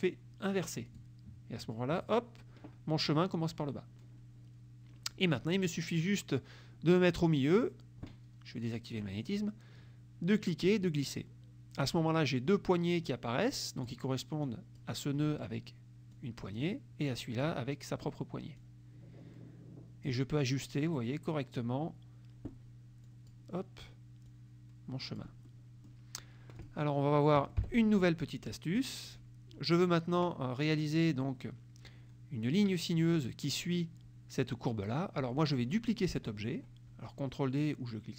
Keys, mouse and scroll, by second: 0.9 click, 9.0 click, 10.8-12.1 drag, 13.2 click, 14.5 click, 16.3 click, 17.3 click, 18.7-20.3 drag, 21.0 click, 23.1 click, 24.4 click, 25.5 middle click, 26.6 click, 27.5 F1, 27.7 Delete, 29.2 click.